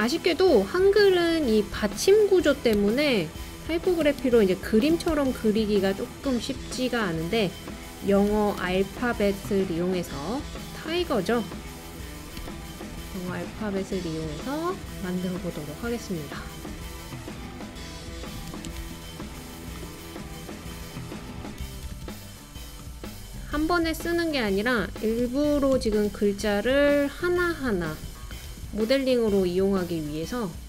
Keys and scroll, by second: 2.8 BackSpace, 3.4 t, 4.0 BackSpace, 5.1 shift+t, 8.3 super+c, 8.6 super+v, 12.4 BackSpace, 18.4 BackSpace, 21.6 super+c, 21.9 super+v, 25.2 BackSpace, 25.9 shift+g, 28.2 super+c, 28.4 super+v.